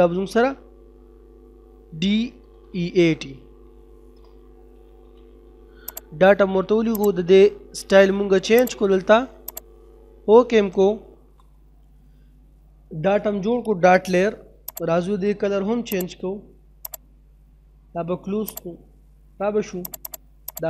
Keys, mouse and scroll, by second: 4.5 e, 5.9 click, 11.0 F9, 14.8 click, 19.0 middle click, 19.9 click.